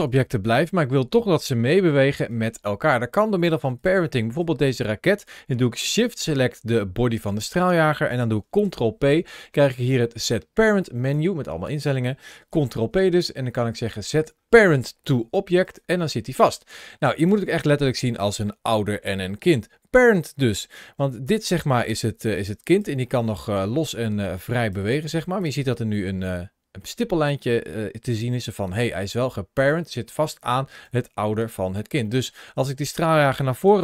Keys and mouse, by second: 1.0 middle click, 1.6 g, 2.0 right click, 2.6 middle click, 5.9 shift+click, 8.5 ctrl+p, 12.6 ctrl+p, 21.1 click, 21.8 g, 22.6 right click, 23.0 middle click, 23.4 g, 24.4 right click, 24.9 g, 26.0-26.8 middle drag, 28.1 ctrl+z, 28.6 middle click, 30.0 middle click, 30.7 g, 31.3 right click, 31.9 middle click, 33.5 g.